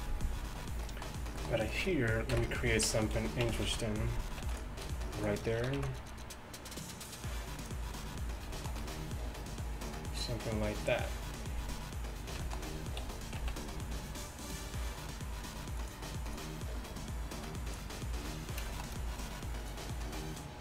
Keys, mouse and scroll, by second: 2.4 KP_1, 3.5 Tab, 3.7 z, 4.5 ctrl+r, 5.7 s.